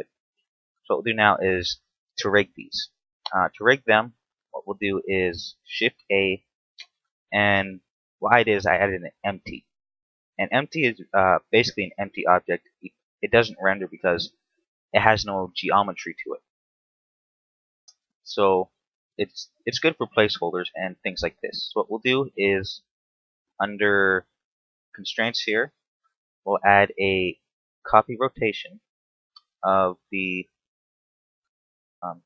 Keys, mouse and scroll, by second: 2.5-2.9 scroll down 2, 2.9 a, 3.2 shift+middle click, 5.9 shift+a, 9.6-10.1 scroll down 3, 10.1 middle click, 10.8 middle click, 10.9-11.6 scroll up 6, 17.2-17.7 scroll down 3, 17.7-18.9 scroll up 4, 20.9 right click, 22.6 middle click, 24.5 click, 25.6 click, 29.0 click, 31.1 click.